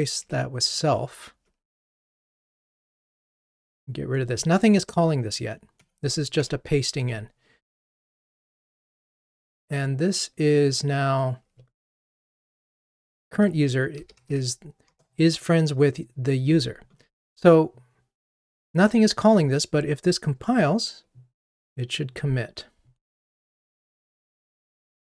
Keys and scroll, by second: 5.9 Delete, 12.6 shift+F6, 20.2 ctrl+r.